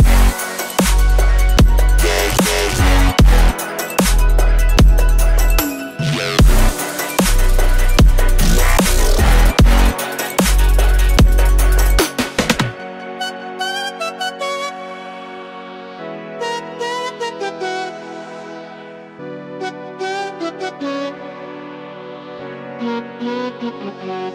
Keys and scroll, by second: 5.9 ctrl+e.